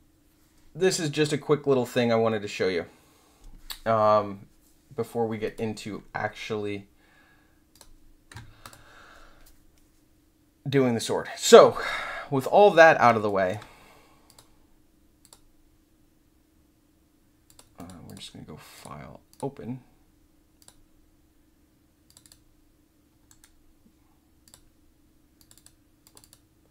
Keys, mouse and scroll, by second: 5.4 click, 7.7 click, 8.6 click, 13.2 alt+click, 14.2 click, 15.2 click, 17.4 click, 17.7 click, 18.0 click, 18.7 click, 19.3 click, 20.5 click, 22.0 click, 22.2 click, 24.4 click, 25.3 click, 25.5 click, 26.0 click, 26.2 click.